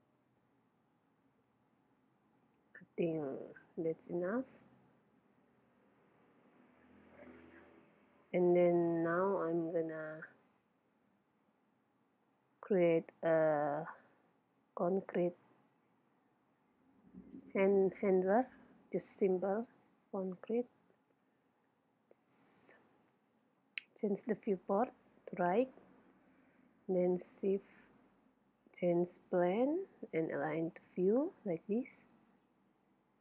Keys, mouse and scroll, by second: 4.4-5.9 drag, 6.7-9.3 middle drag, 9.6-11.3 drag, 11.6-13.3 drag, 19.6-21.3 drag, 21.5 KP_1, 23.6 KP_3, 27.1 shift+a, 30.8-32.4 drag, 32.4-33.2 middle drag, 32.6 scroll down 1.